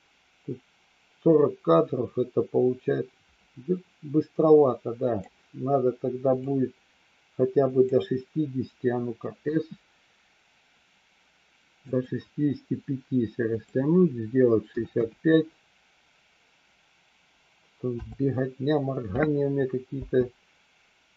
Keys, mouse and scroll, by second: 6.3 click, 13.5-18.2 drag, 19.9 space.